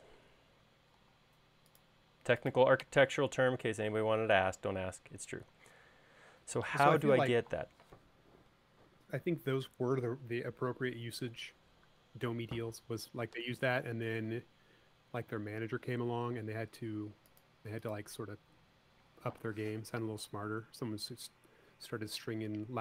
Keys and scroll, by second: 1.6 l, 3.6 space, 10.0 super+Tab.